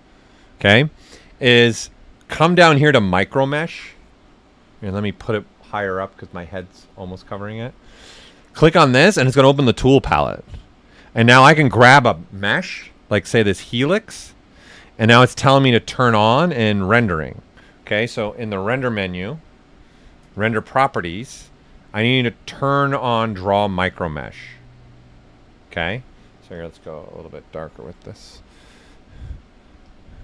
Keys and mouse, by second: 5.2-8.4 drag, 13.3 click, 16.4 click, 18.7 click, 23.9 click, 26.5 click, 28.8 click.